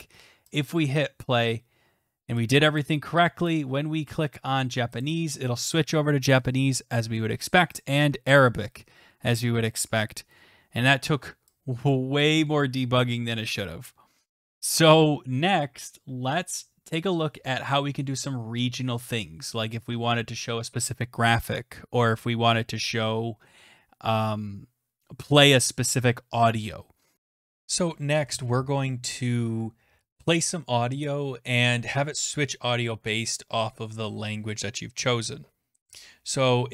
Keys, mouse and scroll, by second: 0.6 click, 2.8 click, 3.5 click, 5.0 click, 7.8 click, 11.9 click, 12.7 click.